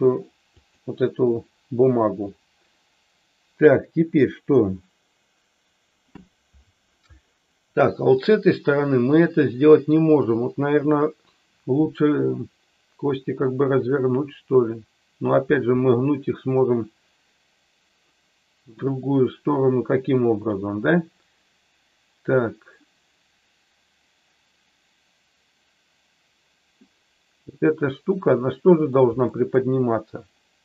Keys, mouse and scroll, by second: 27.6-29.0 middle drag, 29.2 middle click.